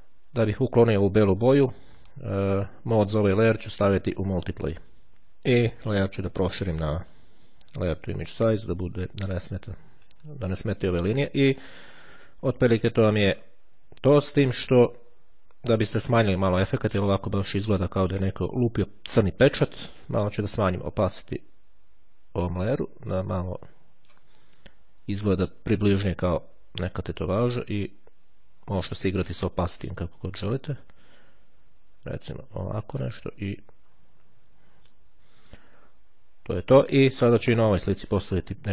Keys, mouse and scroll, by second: 3.1 click, 4.5 click, 5.7 right click, 8.4 click, 12.9-13.5 ctrl+scroll down 2, 13.7-14.1 ctrl+scroll up 2, 14.9-15.5 scroll down 2, 17.5-18.0 ctrl+scroll down 2, 21.0-24.7 drag, 27.3-33.6 drag, 33.9-34.4 ctrl+scroll up 2, 34.9-35.5 ctrl+scroll down 2.